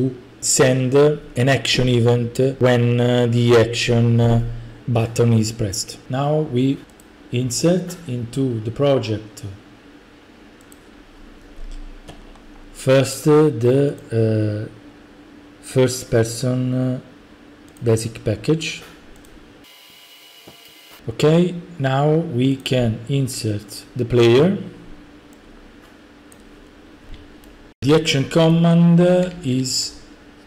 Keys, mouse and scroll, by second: 7.0-10.7 drag, 12.2-12.9 scroll, 14.0 click, 14.6 middle click, 14.7 middle click, 17.8 click, 18.8 click, 19.3-19.7 drag, 22.6-23.7 drag, 23.8-24.9 drag, 26.4-27.1 drag, 27.3-28.5 typing, 27.8 right click.